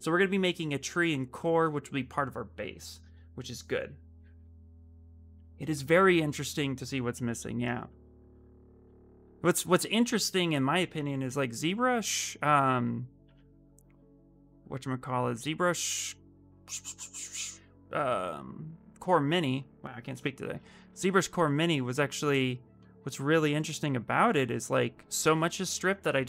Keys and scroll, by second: 11.0 w, 13.0 e, 15.6 y, 20.8 w.